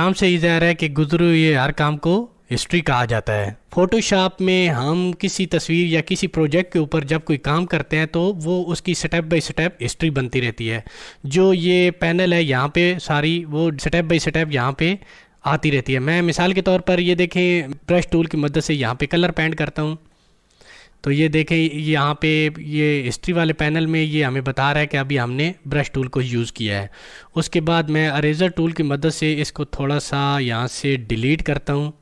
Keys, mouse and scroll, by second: 17.9-28.3 drag, 30.1 alt+Num_Lock, 30.1 click, 30.2 alt+right click, 31.2-32.0 drag.